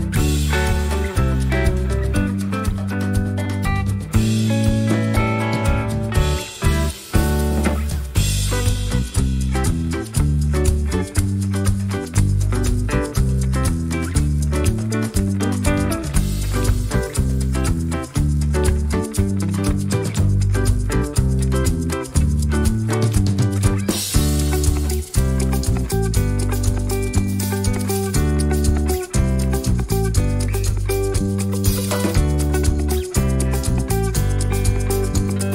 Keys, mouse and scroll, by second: 1.4 click, 2.7-4.0 drag, 4.4-6.1 ctrl+shift+drag, 7.4 click, 8.3 ctrl+c, 9.6 click, 11.6 click, 21.1 click, 22.1-23.1 drag, 23.7 shift+click, 24.7 click, 25.0 click, 25.5 click, 26.6 click, 27.3 click, 28.4 click, 29.5-31.3 ctrl+drag, 31.7 ctrl+shift+click, 35.3 click.